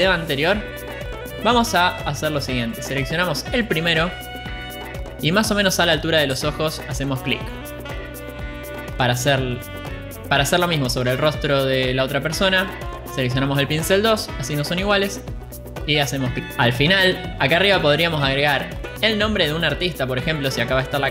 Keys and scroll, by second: 16.3 ctrl+z.